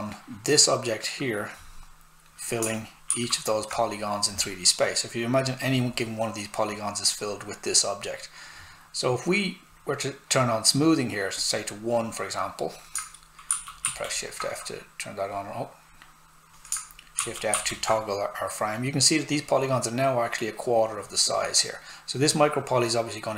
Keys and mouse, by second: 1.5 click, 3.0 shift+f, 9.7 click, 13.5 shift+f, 15.3 click, 17.1 shift+f.